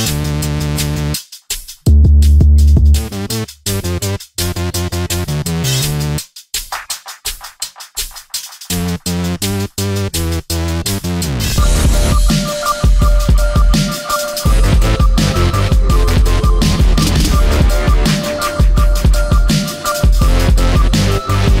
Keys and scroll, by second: 4.6 Delete.